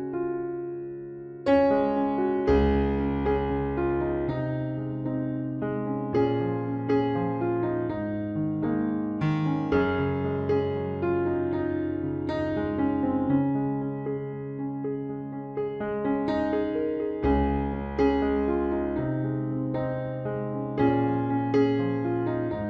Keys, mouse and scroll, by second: 1.3 middle click, 2.3 click, 3.1-4.2 right drag, 3.1 c, 4.2-5.9 middle drag, 6.0 click, 7.6-9.3 middle drag, 9.7 middle click, 10.0 middle click, 10.5 c, 17.7 right click, 17.9 middle click, 18.6 c, 20.3 ctrl+s, 21.4 KP_Decimal.